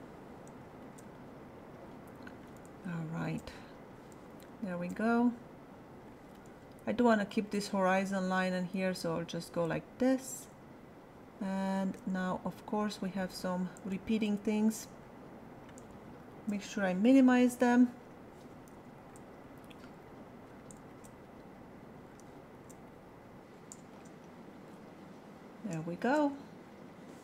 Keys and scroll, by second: 17.1 alt+[.